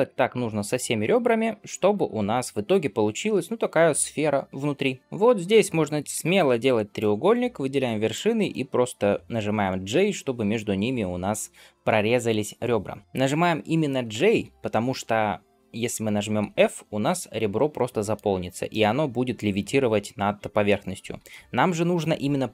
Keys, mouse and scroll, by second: 0.1 shift+click, 0.5 middle click, 1.1 shift+click, 5.0 shift+click, 5.0 scroll up 2, 6.0 j, 6.8 click, 7.9 shift+click, 9.8 j, 13.5-14.0 scroll up 1, 14.2 ctrl+z, 16.3 f, 16.8-18.2 middle drag, 18.2-18.5 scroll up 2, 18.5-20.6 middle drag, 20.9 ctrl+z.